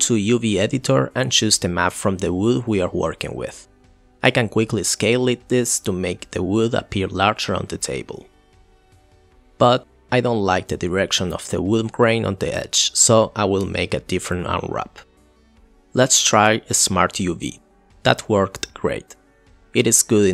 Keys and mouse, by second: 0.1 ctrl+l, 0.6 click, 0.9 g, 1.3 middle click, 2.2 s, 3.2 s, 4.0-4.5 middle drag, 4.8 middle click, 6.1-8.9 middle drag, 9.0-10.8 middle drag, 11.1 middle drag, 12.7 middle click, 13.9-15.8 drag, 17.4 click, 18.1 middle click, 18.9 g, 19.4 r.